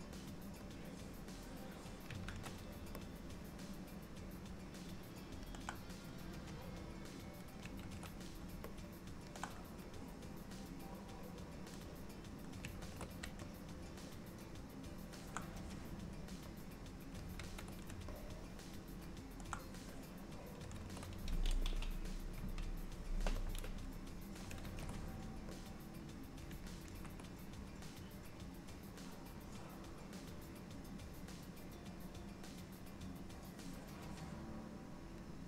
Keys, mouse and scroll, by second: 0.9 click, 2.4 ctrl+z, 3.2 alt+middle click, 6.9 click, 8.0 ctrl+z, 8.8 alt+middle click, 12.0 click, 13.0 ctrl+z, 13.5 alt+middle click, 16.7 click, 17.6 ctrl+z, 18.2 alt+middle click, 20.2 click, 21.0 ctrl+z, 22.4 KP_3, 23.7 click, 24.8 ctrl+z, 25.7 click, 27.0 ctrl+z, 29.6 click.